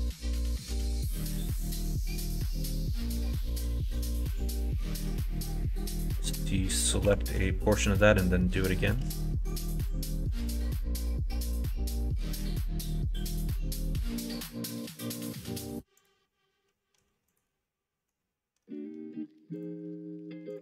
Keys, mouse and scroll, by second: 6.1 KP_1, 6.3 KP_3, 7.0 3, 7.8-8.9 shift+drag, 9.5 alt+z, 10.3 ctrl+z, 11.7 b, 15.9-17.3 drag, 19.6-20.6 drag.